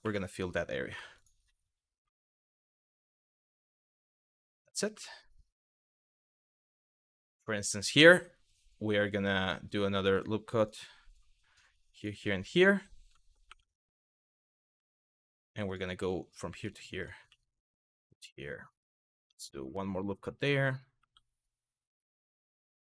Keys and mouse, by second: 0.5 w, 0.8 click, 2.1 shift+click, 2.3 f, 3.4 shift+click, 3.6 f, 4.1 middle click, 4.7 middle click, 5.6 middle click, 6.2 middle click, 6.9 shift+middle click, 9.0 click, 9.8 click, 10.2 click, 11.6 click, 13.1 2, 14.4 w, 15.6 f, 16.9 f, 17.4 click, 19.9 click, 20.6 2, 21.8 w, 22.6 shift+click.